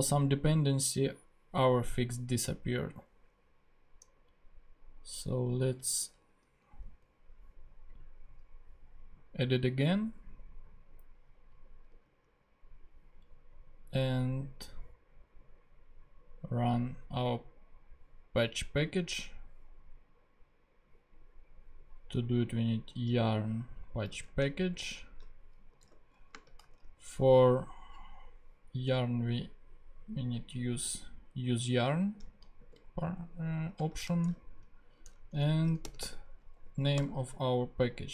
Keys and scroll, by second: 2.1 super+Tab, 6.3 super+z, 12.0 super+Tab, 24.1 super+c, 24.2 super+Tab, 25.8 super+v, 26.3 super+space, 26.7 super+Tab, 31.6 super+c, 31.8 super+Tab, 32.6 super+v, 33.8 super+space, 34.1 super+space, 34.2 super+Tab, 35.3-38.1 typing.